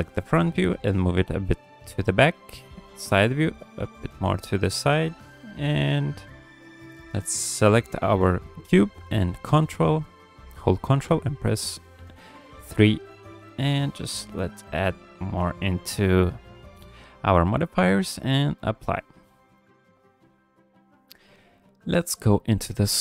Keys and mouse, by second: 0.2 g, 3.8 g, 6.2-6.8 drag, 11.0 ctrl+3, 14.2-18.7 right drag, 19.2 shift+middle drag, 19.6 ctrl+middle drag, 20.5 KP_1, 21.5 middle drag.